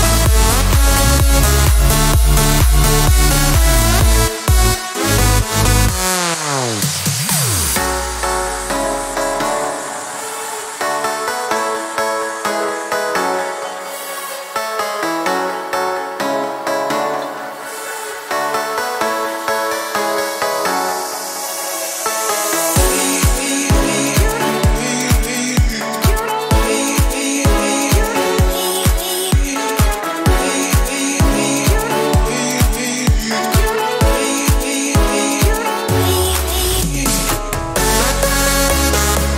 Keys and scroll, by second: 0.7 Escape, 2.9-4.3 typing, 5.4 Escape, 9.4 ctrl+d, 20.3 Escape, 34.7 shift+a, 35.2 Return, 36.1-38.2 typing.